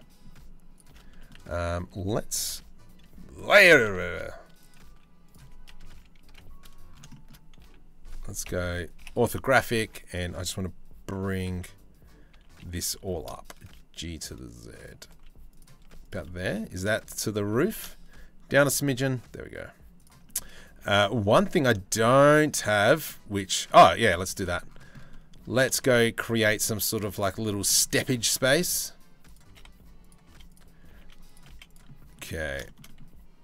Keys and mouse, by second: 0.8 click, 1.5 z, 3.4 z, 4.5 z, 5.6 KP_3, 5.9 KP_1, 8.1 KP_5, 8.6 KP_5, 9.4 1, 12.0 a, 12.6 g, 15.4 z, 16.5 shift+middle click, 17.2 g, 19.9 shift+middle click, 22.2 Tab, 25.4 shift+a, 27.0 click, 27.9 Tab, 28.1 s, 29.1 s, 29.9 z, 30.5 g, 31.1 z, 31.9 click, 32.2 shift+middle click, 32.5 click, 33.2 s.